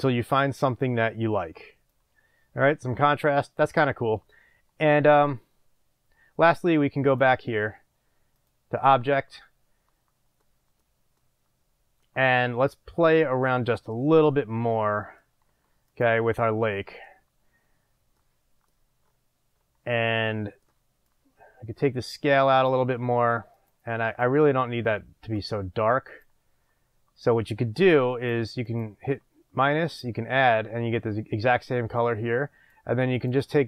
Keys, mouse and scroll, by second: 8.7-10.4 drag, 11.0-16.0 drag, 21.2-23.8 drag, 24.2 click, 28.2-28.5 drag, 28.8-29.3 drag, 29.9-30.5 drag, 32.1-33.5 drag.